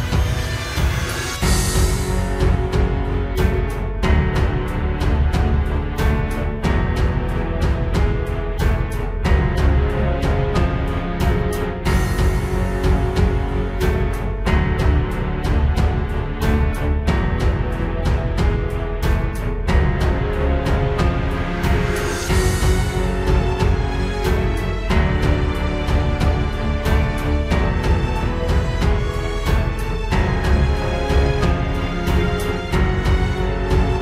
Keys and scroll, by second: 1.1 ctrl+g, 4.9 ctrl+space, 5.7 ctrl+j, 6.6 ctrl+t, 6.8 ctrl+z, 10.2 ctrl+space, 11.4 ctrl+i, 11.6 ctrl+space, 11.8 ctrl+z, 12.4 ctrl+space, 14.7 ctrl+space, 16.0 ctrl+s, 16.1 ctrl+space, 17.0 ctrl+space, 18.3 ctrl+j, 18.4 ctrl+z, 18.6 ctrl+j, 18.9 ctrl+t, 19.9 ctrl+t, 20.8 ctrl+space, 21.1 ctrl+r, 22.4 ctrl+t, 25.3 ctrl+space, 26.2 ctrl+z, 26.7 ctrl+t, 27.2 ctrl+space, 29.2 ctrl+t, 30.5 ctrl+space, 31.1 ctrl+space, 33.9 ctrl+t.